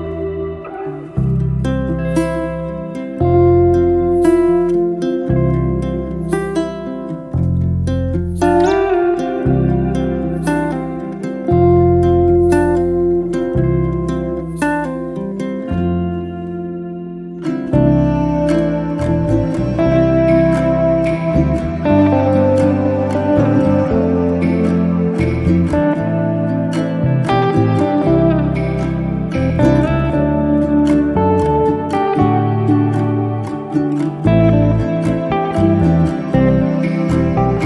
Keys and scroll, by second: 1.5 m, 3.2 Escape, 9.2 Escape, 9.9 space.